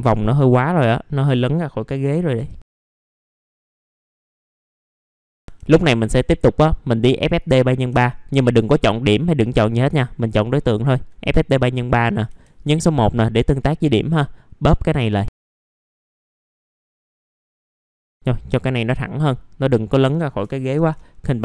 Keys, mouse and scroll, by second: 2.4 t, 2.7 scroll down 1, 2.9 scroll up 1, 3.2 alt+middle click, 3.4 middle click, 3.6 alt+middle click, 4.1 right click, 4.9 click, 10.5 middle click, 10.7 alt+middle click, 12.3 1, 12.7 click, 14.3-15.5 drag, 15.9 alt+middle click, 16.2 click, 16.5 ctrl+click, 17.0 click, 17.8 alt+middle click, 18.3 middle click, 18.7 alt+middle click.